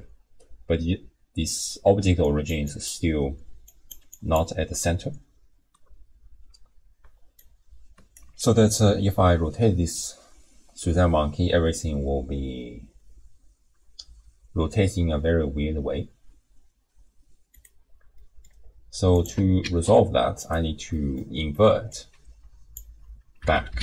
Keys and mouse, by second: 2.0 d, 2.2 click, 2.6 click, 2.6-3.6 d, 3.7 click, 3.7-4.7 d, 4.1 click, 7.0 d, 7.4 click, 8.1 d, 8.3 d, 8.6 r, 18.2 click, 18.2 right click, 19.2 click, 19.7 shift+d, 20.9 middle click, 21.9-23.8 drag.